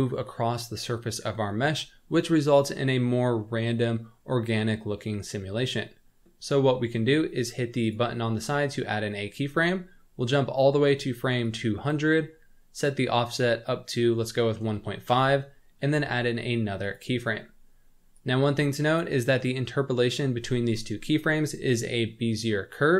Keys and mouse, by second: 7.8 click, 11.4 click, 12.8-15.1 drag, 16.8 click, 18.1 click.